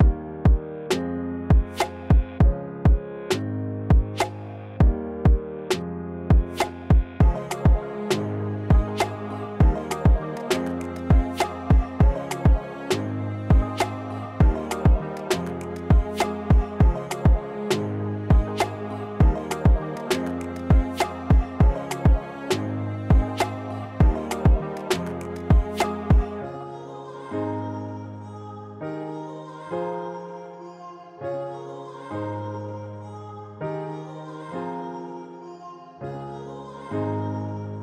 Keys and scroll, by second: 5.4 s, 15.4 s, 19.2 b, 19.8 4, 20.7 s.